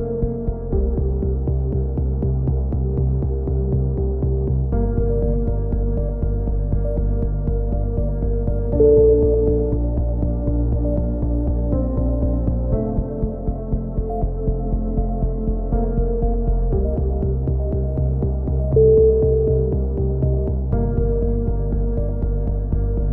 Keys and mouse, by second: 0.3 a, 0.6 Tab, 0.7 click, 2.6 click, 3.8 z, 4.0 z, 4.1 Tab, 4.2 click, 6.3 click, 6.4-7.7 right drag, 6.6 x, 7.7-9.1 drag, 10.2 click, 11.3 right click, 11.3 e, 11.7 click, 12.4 z, 12.5 z, 12.6-14.2 right drag, 13.2 f, 14.1 e, 14.4 click, 14.8 right click, 15.4 f, 15.4 a, 15.5 z, 15.7 click, 18.0 click, 18.0 right click, 18.4 x, 18.8 z, 19.0 click, 20.0-21.1 right drag, 21.0-21.5 typing, 22.7 a, 22.8 click.